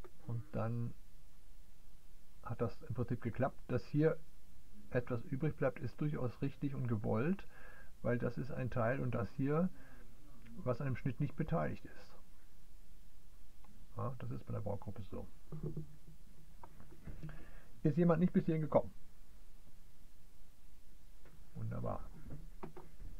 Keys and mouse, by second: 0.0-22.9 drag.